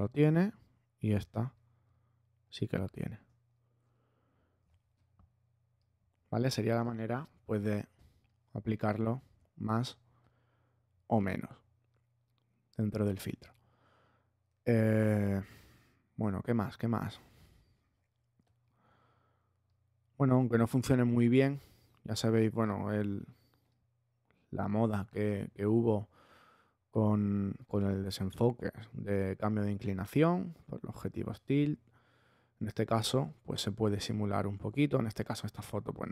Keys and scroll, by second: 4.7 space.